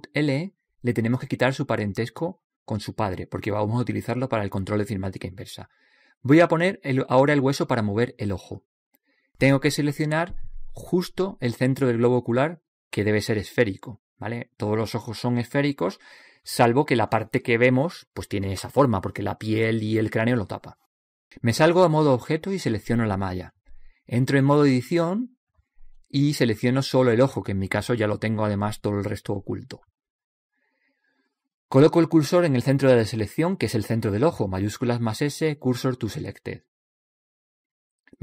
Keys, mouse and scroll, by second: 0.7 right click, 3.2-5.9 middle drag, 9.2 click, 11.6-16.7 middle drag, 23.2 click, 24.5 right click, 25.8 Tab, 33.3 shift+s.